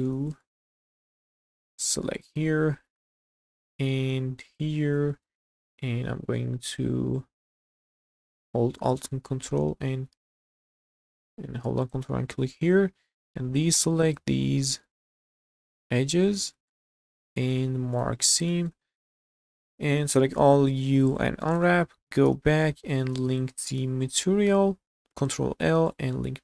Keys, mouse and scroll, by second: 0.2 scroll up 1, 0.4 shift+middle click, 0.9 scroll up 2, 1.2 shift+middle click, 2.1 alt+click, 3.0 shift+middle click, 4.5 alt+shift+click, 5.2 shift+middle click, 8.9 alt+shift+click, 10.9 ctrl+z, 11.8 alt+shift+click, 13.4 ctrl+click, 13.9 ctrl+click, 14.4 ctrl+click, 15.5 ctrl+click, 16.3 scroll down 2, 16.7 shift+middle click, 17.3 q, 18.0 click, 18.2 scroll down 2, 18.5 middle click, 18.7 a, 20.3 u, 21.6 Tab, 22.2 /, 23.3 shift+click, 25.1 ctrl+l.